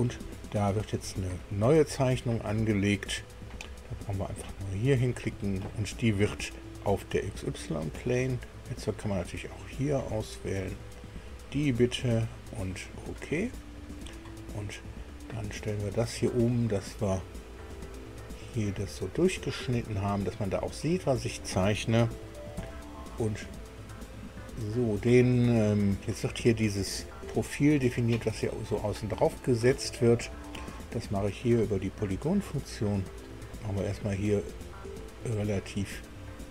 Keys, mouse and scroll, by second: 4.5 click, 8.4-8.9 scroll down 2, 9.2-11.0 scroll up 2, 11.0 click, 13.0 click, 16.4 click, 17.8-18.4 scroll up 2, 18.5-21.6 middle drag, 22.6 KP_2, 24.2-24.7 scroll up 4, 31.5 click, 33.2 click, 34.5 click, 35.5 click.